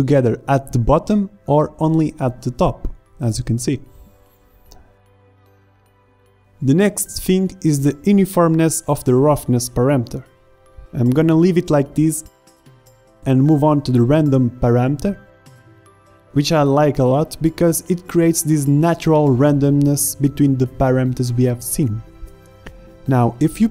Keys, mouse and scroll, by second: 4.3 middle click, 21.5-23.7 middle drag.